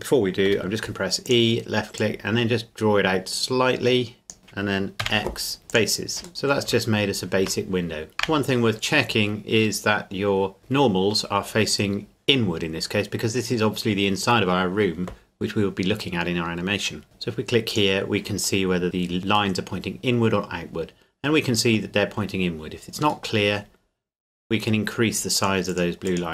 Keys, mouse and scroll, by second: 0.4 e, 1.2 click, 5.0 x, 5.7 click, 6.3 middle click, 6.7 Tab, 8.1 middle click, 9.1-10.6 scroll down 1, 10.6 a, 17.0-17.7 scroll down 1, 17.7 click, 18.6 middle click, 20.4-20.8 scroll up 1, 22.3 middle click, 23.8-24.3 scroll up 1, 25.4 click.